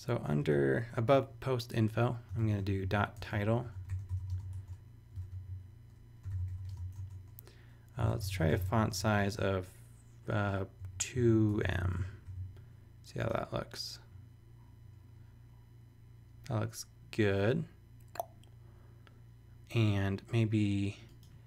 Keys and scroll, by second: 0.1 Down, 0.4 Return, 2.3-4.9 typing, 5.1 shift+super+Return, 5.6 super+z, 6.1-12.3 typing.